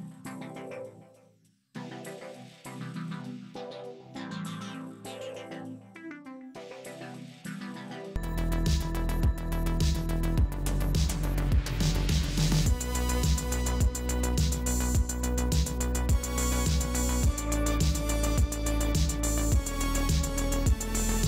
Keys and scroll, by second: 0.5 space, 19.2 space.